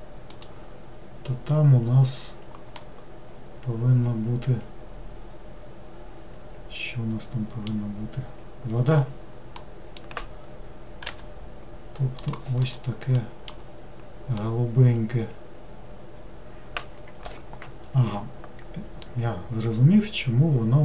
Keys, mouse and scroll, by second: 2.8-6.0 middle drag, 9.6-11.1 middle drag, 11.1 g, 12.7 click, 13.2 middle click, 13.7 scroll down 1, 14.5-17.5 middle drag, 19.1-20.8 middle drag.